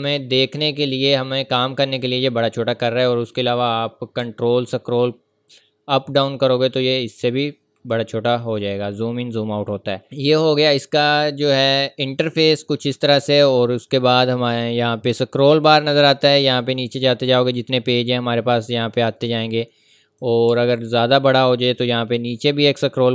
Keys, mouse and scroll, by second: 0.8 scroll up 1, 4.2-4.6 scroll up 2, 5.1 scroll down 1, 5.7-6.6 scroll up 3, 6.6 scroll down 1, 6.8 ctrl+scroll up 1, 7.1 ctrl+scroll down 1, 7.3 ctrl+scroll up 1, 7.5 ctrl+scroll down 1, 8.1 ctrl+scroll down 1, 8.5 ctrl+scroll up 1, 9.2-10.0 scroll up 1, 13.1-15.1 scroll down 1, 15.1 click, 20.7 scroll up 1, 21.0 ctrl+v, 21.3 ctrl+scroll up 1, 22.6 click.